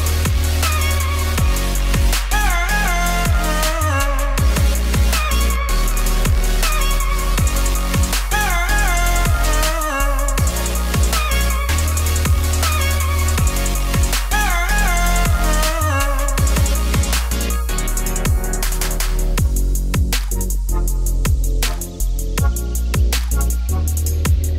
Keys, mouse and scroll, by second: 0.2 click, 0.6 KP_7, 2.1 shift+d, 2.8 middle click, 3.3 KP_3, 3.5 shift+middle click, 3.7 scroll up 10, 4.0-5.5 shift+middle drag, 5.5 g, 6.8 KP_0, 7.4 g, 8.1 g, 8.6 g, 9.3-10.5 drag, 12.6 click, 13.5 click, 14.7-15.1 scroll down 3, 15.1 ctrl+s, 15.3 click, 15.9 click, 18.5 click, 19.3 click.